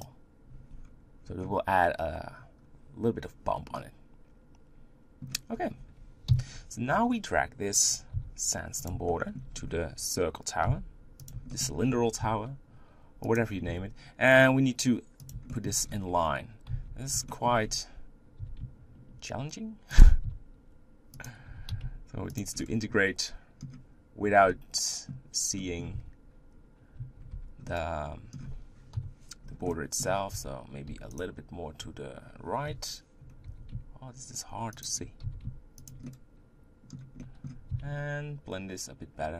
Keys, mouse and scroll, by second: 0.8-2.6 scroll up 1, 2.6-3.2 scroll down 1, 3.5 scroll down 1, 3.7-5.5 middle drag, 5.5-6.3 scroll down 1, 6.3 KP_1, 6.9-8.1 scroll down 5, 8.1 g, 9.1 shift+middle click, 9.5-10.7 scroll up 2, 10.7 s, 11.5 shift+middle click, 11.7-12.2 scroll up 4, 12.2 g, 13.8 s, 15.5 shift+middle click, 15.8-16.7 scroll up 1, 16.7 scroll up 1, 16.9 z, 17.3 shift+middle click, 17.6-18.4 scroll up 1, 18.4 g, 20.3 s, 21.5 g, 22.6 middle click, 24.5-25.9 middle drag, 25.9 Tab, 27.3 Tab, 27.7-28.9 middle drag, 28.9 KP_1, 29.7 middle click, 30.3 g, 32.7 KP_1, 33.5 g, 35.2 g, 36.0 middle click, 37.2 middle click, 37.7 s.